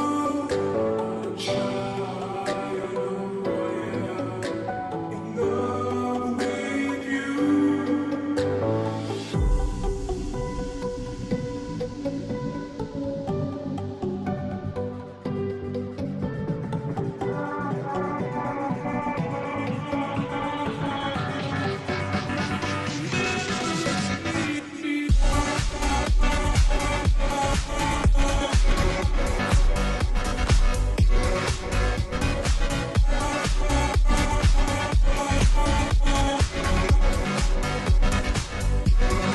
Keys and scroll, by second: 3.2-6.0 space, 16.4-18.4 typing, 20.2 ], 20.4 ], 22.7 ], 22.8 ], 23.4 ], 28.9 ], 29.2 ].